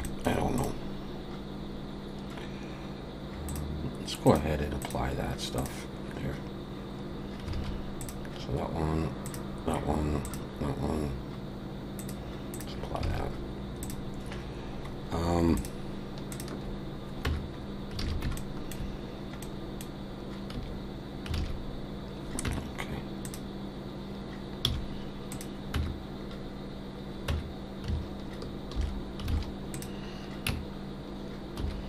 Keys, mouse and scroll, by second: 0.0 middle click, 0.6 click, 3.5 click, 7.5 alt+a, 8.0 click, 9.2 click, 12.0 click, 13.1 alt+a, 13.8 click, 14.3-14.9 scroll down 1, 14.9 scroll up 3, 15.6 shift+click, 17.3 Tab, 17.6-17.9 scroll up 2, 18.0 alt+a, 18.4 shift+middle click, 19.1-19.4 scroll down 1, 19.4 middle click, 20.5 a, 21.4 alt+a, 22.4 Tab, 23.2 click, 24.7 h, 25.3 click, 25.7 Tab, 27.3 Tab, 28.7 alt+h, 29.3 alt+a, 29.7 click, 30.5 Tab, 31.6 2.